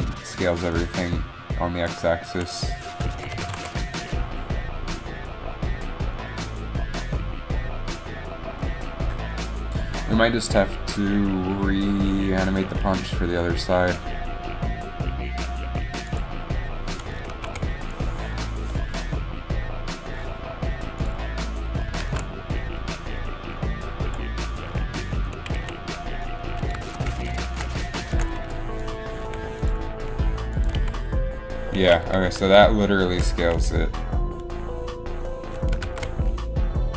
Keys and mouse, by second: 3.1 space, 21.2-24.2 drag, 24.2 ctrl+z, 25.5 a, 25.7 a, 27.4 ctrl+n, 28.2 ctrl+m, 29.3 i, 31.0 alt+a, 31.5 i, 32.0 alt+a, 34.6 ctrl+z.